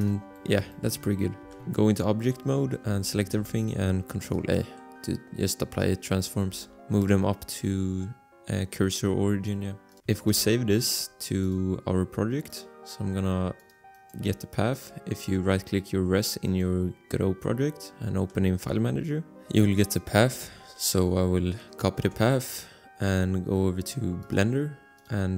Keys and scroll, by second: 1.4 a, 1.6 Escape, 2.8 a, 3.5 ctrl+a, 6.5 g, 6.8 z, 10.5 ctrl+s, 22.2 ctrl+c.